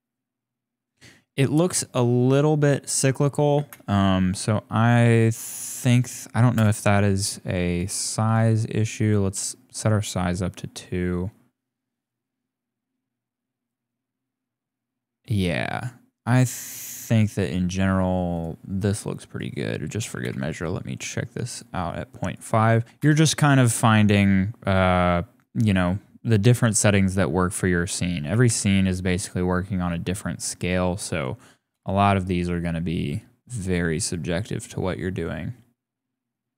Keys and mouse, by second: 3.5 space, 5.5-6.5 drag, 8.2 click, 8.6 click, 9.0 click, 18.3 click, 19.3 click, 22.2 click, 22.8 click, 23.7-28.5 drag, 30.5-31.7 drag, 33.4 click.